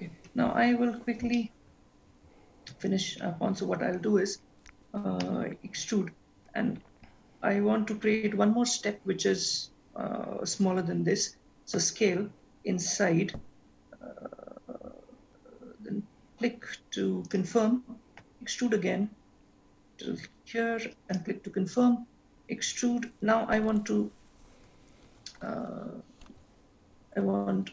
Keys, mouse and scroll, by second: 1.4 shift+middle click, 5.3 e, 18.3 e, 22.3 e.